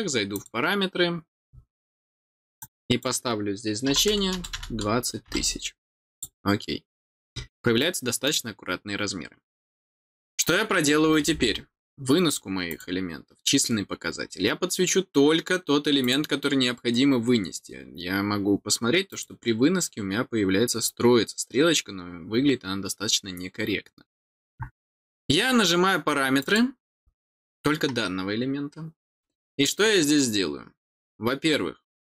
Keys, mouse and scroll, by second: 0.3 click, 2.6 click, 6.1 click, 7.8 middle click, 8.9-9.7 scroll down 3, 12.6 click, 16.0 click, 19.1 click, 26.4 click.